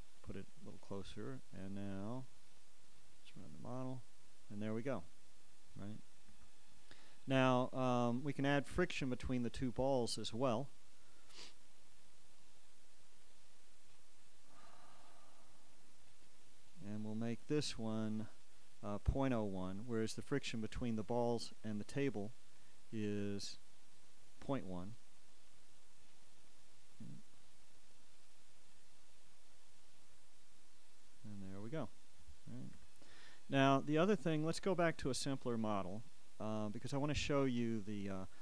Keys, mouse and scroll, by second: 0.7-3.0 drag, 3.9 click, 6.5 Escape, 10.5-13.1 drag, 13.9 click, 16.2-18.3 drag, 19.9-26.0 drag, 26.1-31.2 drag, 33.0 Escape, 36.4-38.4 drag.